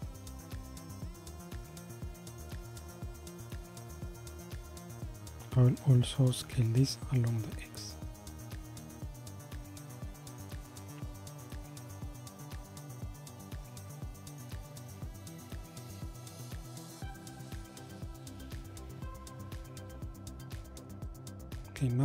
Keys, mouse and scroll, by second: 6.6 s, 17.3-18.6 middle drag, 18.6-19.1 scroll up 3, 19.3-20.2 scroll down 2, 20.2-21.2 middle drag, 21.2-22.0 scroll up 1.